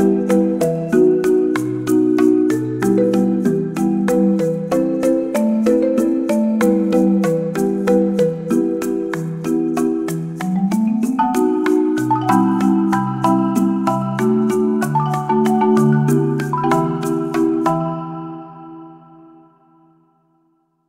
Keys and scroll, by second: 13.9-14.7 typing.